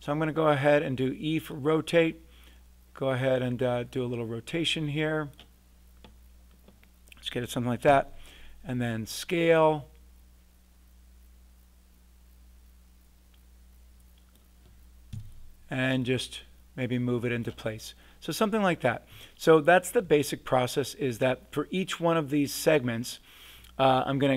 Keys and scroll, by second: 7.9 r, 15.1 w.